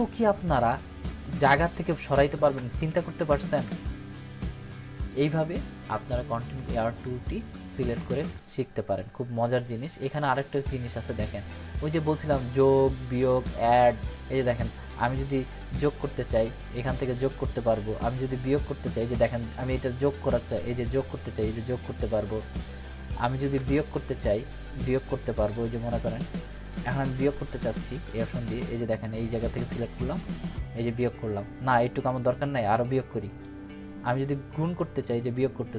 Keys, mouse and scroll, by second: 1.7 ctrl+d, 6.0-7.0 drag, 10.4 click, 14.9-15.9 drag, 18.4-22.1 drag, 23.5 ctrl+d, 24.7-26.2 drag.